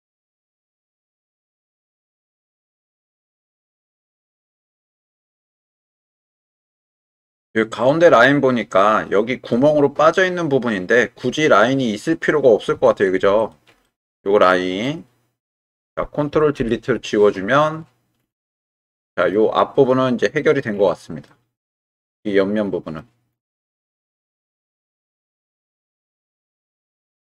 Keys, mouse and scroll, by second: 0.9 g, 2.0 click, 2.9 g, 4.3 click, 5.1 click, 6.2 click, 7.5-8.8 middle drag, 9.2 middle click, 12.7 2, 13.4 alt+click, 13.8-14.8 middle drag, 16.6 ctrl+Delete, 18.8 middle click, 21.2-22.9 middle drag, 24.8 1, 25.3 click, 26.6 g, 26.7 x.